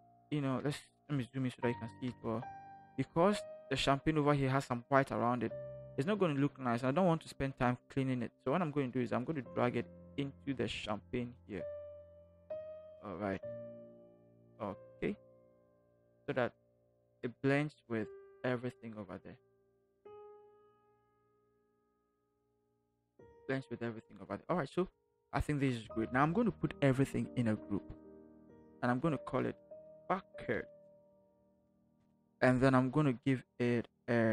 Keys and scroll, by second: 2.1 ctrl+=, 2.4 ctrl+=, 15.3 ctrl+-, 28.6 ctrl+shift+g, 29.6-31.8 typing.